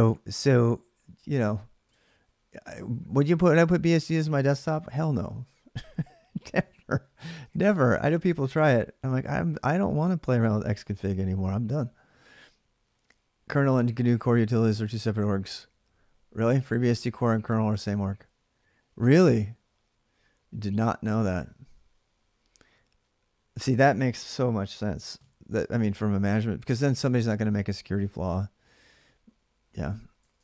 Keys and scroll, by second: 7.0-8.2 typing, 29.9-30.4 typing.